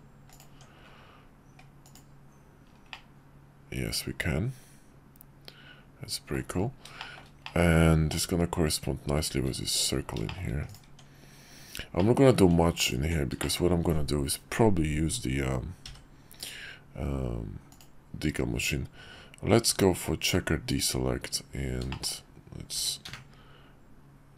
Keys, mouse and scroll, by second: 0.5 Tab, 2.9-6.3 middle drag, 7.0 shift+middle drag, 7.4-8.1 middle drag, 10.2 `, 10.3 shift+middle drag, 10.8 Tab, 12.0 middle click, 13.4 shift+middle click, 17.7-20.8 drag, 21.9 shift+middle click.